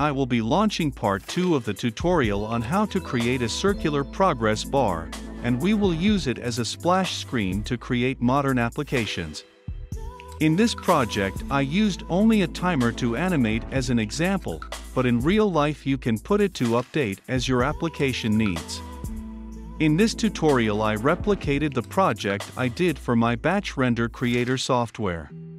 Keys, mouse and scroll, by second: 4.0 ctrl+F5, 5.1-11.8 drag, 11.9 ctrl+F5, 13.0-17.9 drag, 17.8 F5, 19.3-25.5 drag.